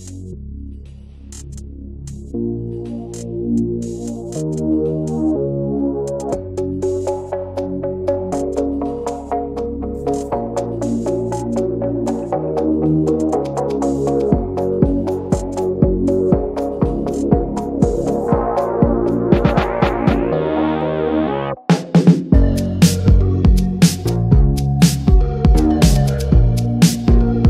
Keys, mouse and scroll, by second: 0.1 alt+middle click, 0.3 click, 0.5 ctrl+a, 1.0 middle click, 1.1 ctrl+s, 1.3 Tab, 1.5 scroll up 1, 1.6-2.1 middle drag, 2.1 3, 2.2 click, 2.7 alt+shift+click, 3.0 alt+shift+click, 3.3-4.4 middle drag, 4.4 2, 4.5 click, 5.3 alt+shift+drag, 5.6-6.7 middle drag, 6.7 shift+d, 7.2 middle click, 7.8 click, 8.6 e, 9.2 click, 10.4 Tab, 10.6 middle drag, 10.9 click, 11.0-11.3 right drag, 11.3 middle click, 11.6 Tab, 11.6-12.3 middle drag, 12.3 f, 12.6 middle drag, 12.8 Tab, 13.0 scroll down 1, 13.3-13.8 alt+middle drag, 13.8 Tab, 14.0 middle click, 14.1 scroll up 1, 14.3-15.1 shift+middle drag, 15.1 click, 15.8-17.4 middle drag, 17.4 ctrl+s, 17.9 click, 18.3 Tab, 18.6 click, 18.9 ctrl+a, 19.3 click, 19.6 ctrl+a, 20.1 middle drag, 20.7 Tab, 20.9 alt+middle click, 21.0 alt+middle click, 21.2-21.7 scroll up 3, 21.4 alt+middle click, 21.8 s, 22.8 middle click, 22.9 scroll up 2, 23.1-23.5 shift+middle drag, 23.5 s, 24.1 alt+middle click, 24.2 alt+middle click, 24.6 ctrl+a, 25.2 ctrl+b, 27.3-27.4 middle drag.